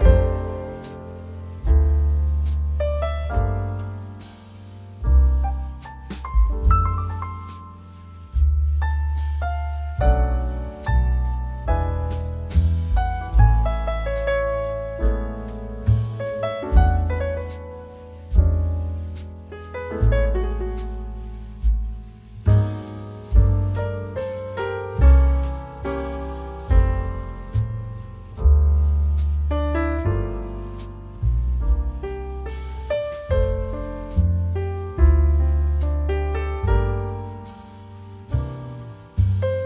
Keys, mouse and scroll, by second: 0.1 scroll down 1, 2.1-4.8 drag, 6.1-8.2 drag, 8.8 scroll down 1, 11.0 click, 11.2 space, 11.4 click, 11.7 space, 13.3-15.7 drag, 15.7 ctrl+z, 16.6 space, 16.7 click, 17.1 space, 17.5 space, 18.9 click, 21.5-39.6 drag.